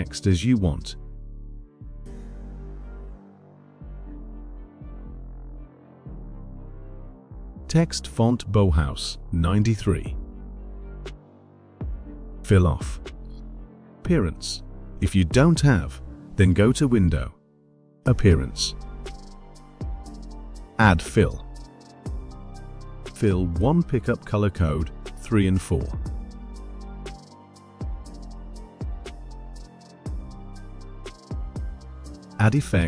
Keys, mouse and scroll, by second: 0.3-1.2 typing, 1.8 click, 2.6-4.4 shift+drag, 4.4-6.3 shift+drag, 7.0 click, 8.6 click, 10.1 click, 12.7 click, 17.3 click, 20.2 click, 21.6 click, 23.5 click, 29.2-31.1 drag, 31.3 click, 32.6 click.